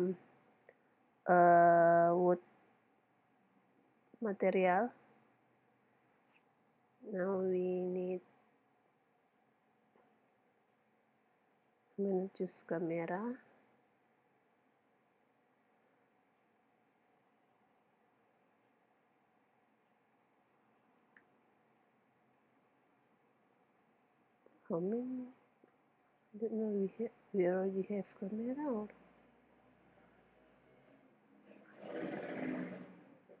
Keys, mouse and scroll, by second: 2.5-4.3 drag, 6.8-11.7 middle drag, 9.7 shift+a, 13.9 shift+Tab, 14.9-16.7 drag, 17.6 KP_7, 19.2 g, 20.4 click, 21.3 KP_0, 21.9 click, 23.2-25.7 middle drag, 25.7 KP_0, 26.7 middle click, 27.0 middle click, 29.8-33.0 middle drag, 33.0-33.4 drag.